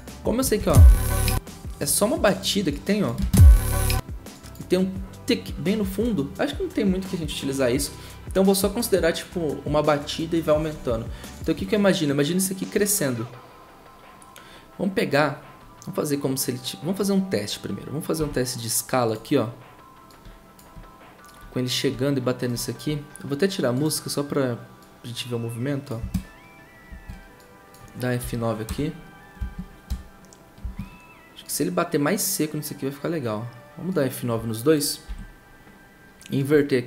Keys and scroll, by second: 18.2 s, 28.2 F9, 28.6 0, 29.9 0, 35.0 F9.